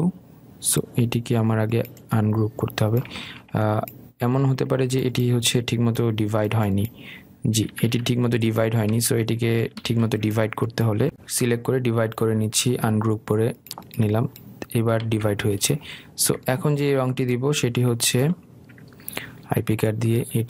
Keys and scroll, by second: 8.8 ctrl+z, 10.9 ctrl+shift+z, 16.2 ctrl+z.